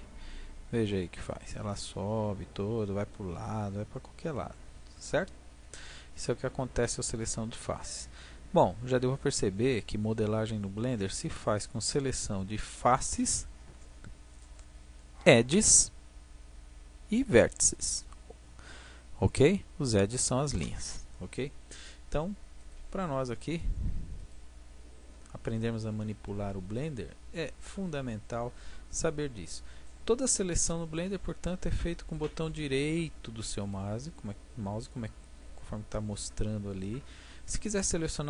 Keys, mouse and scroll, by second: 8.1-9.9 drag, 22.5-26.7 drag, 26.7 middle click, 27.0-33.6 middle drag, 33.6-35.7 right drag, 35.7 middle click.